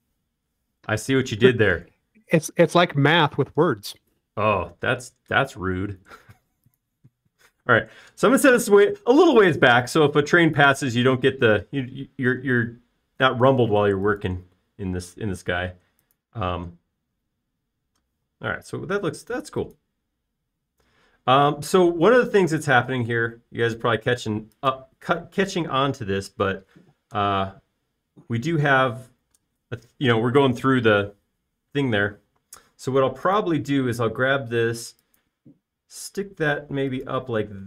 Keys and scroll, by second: 5.3 m, 17.6 space, 19.1-19.9 typing, 26.2 space, 33.5-34.7 typing.